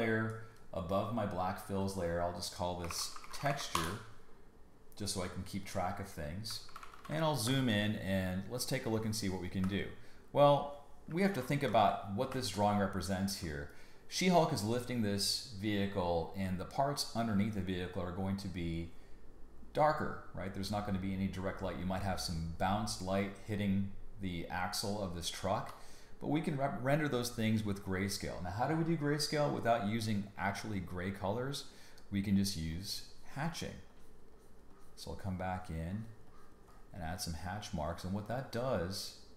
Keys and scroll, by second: 2.6-4.0 typing, 6.7 super+=, 7.4 space, 11.3 super+-, 12.3 space, 25.5 b.